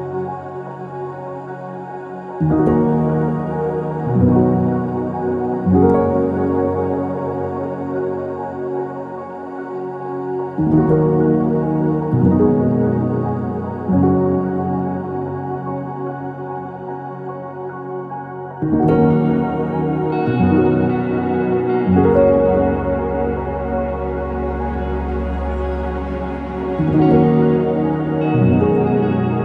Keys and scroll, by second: 0.7-3.4 typing, 3.4 Return, 7.2 ctrl+z, 7.5 BackSpace, 7.7 BackSpace, 7.8 BackSpace, 12.8-14.1 typing, 14.2 Return, 17.1 ctrl+z, 18.9 BackSpace, 19.2 BackSpace.